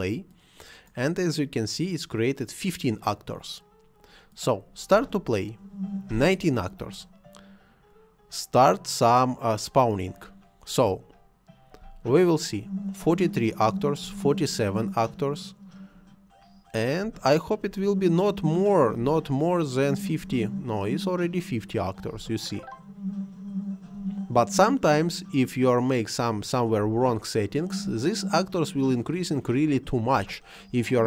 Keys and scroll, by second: 4.9 space, 11.7 space, 17.0 space, 18.9 space, 22.1 space, 26.8 space, 30.1 space.